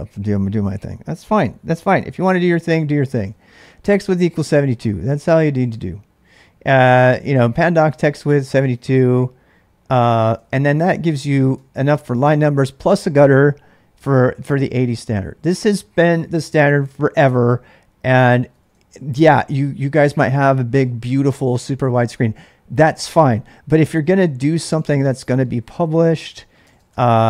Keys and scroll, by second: 0.5-5.7 typing, 8.6 n, 10.4 ctrl+[, 10.5 ctrl+j, 11.3 ctrl+[, 11.4 k, 11.5 k, 12.1-12.8 l, 18.3-19.9 typing, 24.4-27.2 typing.